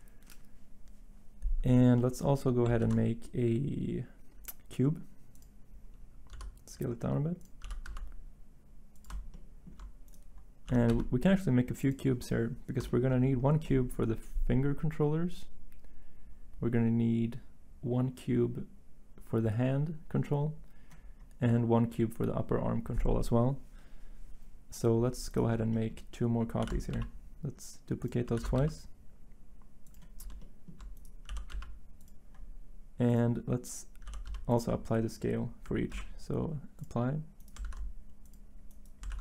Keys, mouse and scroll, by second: 2.8 a, 6.3 s, 7.6 g, 7.8 x, 10.7 g, 10.9 x, 26.6 d, 28.4 d, 31.3 g, 34.0 g, 35.9 ctrl+a, 37.6 ctrl+a, 39.1 ctrl+a.